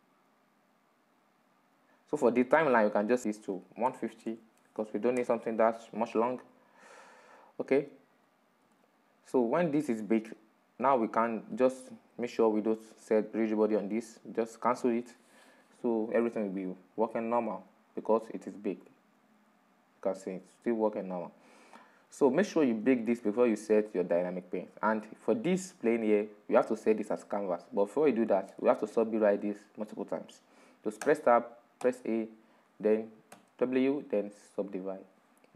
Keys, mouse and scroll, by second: 4.3-8.5 drag, 8.6-9.6 scroll up 7, 9.6-10.7 middle drag, 10.7-11.1 scroll up 2, 11.1-13.6 middle drag, 13.6 right click, 16.9-18.5 drag, 18.5-19.5 middle drag, 19.5 click, 20.2-24.5 drag, 24.5-27.5 middle drag, 29.9-33.3 middle drag, 33.3 Tab, 34.1 a.